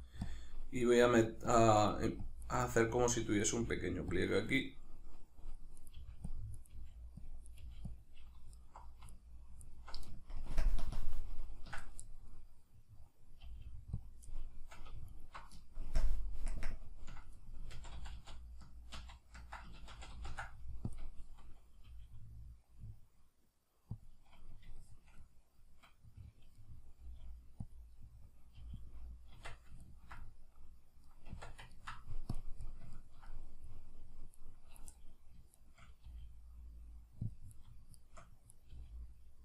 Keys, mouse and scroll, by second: 0.3 click, 0.8 right click, 1.0 g, 1.6 click, 1.8 right click, 2.0 g, 2.3 click, 2.4 right click, 2.6 g, 3.0 click, 3.4 right click, 3.6 g, 4.2 click, 5.8 right click, 6.0 g, 6.4 click, 6.6 right click, 6.8 g, 7.4 click, 7.5 right click, 7.6 g, 8.0 click, 8.6 alt+right click, 9.1 alt+right click, 9.6 alt+right click, 10.4 ctrl+KP_Add, 10.8 ctrl+KP_Subtract, 12.3-14.1 middle drag, 13.4 g, 14.1 click, 14.4-15.1 middle drag, 15.1 alt+right click, 15.9 ctrl+KP_Add, 17.8 ctrl+z, 19.9 ctrl+shift+z, 20.9 click, 21.8 g, 24.0 click, 24.4-27.7 middle drag, 27.0 g, 27.7 click, 27.9-28.9 middle drag, 28.5 g, 28.9-29.8 drag, 29.3 Tab, 29.8-32.4 ctrl+middle drag, 31.3 Tab, 32.4 drag, 32.6-34.4 middle drag, 34.4 right click, 35.0 middle click, 35.6 shift+right click, 36.0 g, 37.4 click, 37.5 right click, 38.0 shift+right click, 38.5 right click, 38.8 g.